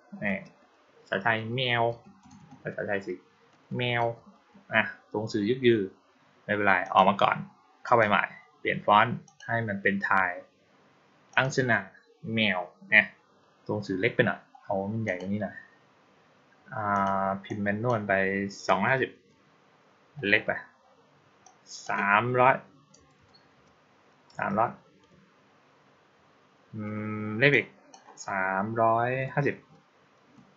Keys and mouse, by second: 6.7 click, 7.7 click, 9.1 click, 11.2 click, 14.9 click, 16.8 click, 17.3 click, 21.3-21.7 drag, 27.4-27.8 drag.